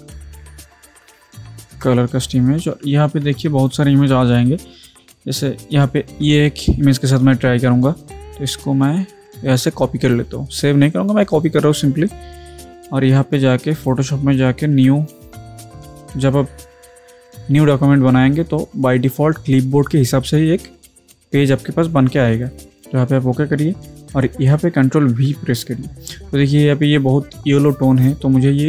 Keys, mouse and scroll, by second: 0.0-1.5 typing, 1.7 Return, 3.6 click, 6.2 scroll down 1, 8.0 click, 9.5 right click, 11.5 click, 13.8 click, 14.7 ctrl+n, 22.5 click, 25.2 ctrl+v.